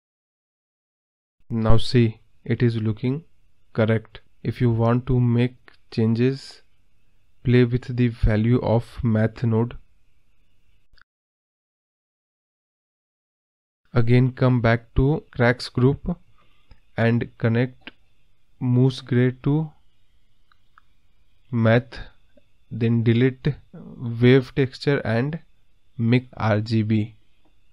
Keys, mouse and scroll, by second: 0.3-0.6 middle drag, 1.2 click, 1.5 click, 1.7 click, 2.0 scroll down 1, 2.0-3.1 middle drag, 3.1 click, 4.5-5.5 scroll up 4, 5.5-13.7 drag, 14.3 click, 26.1 Delete.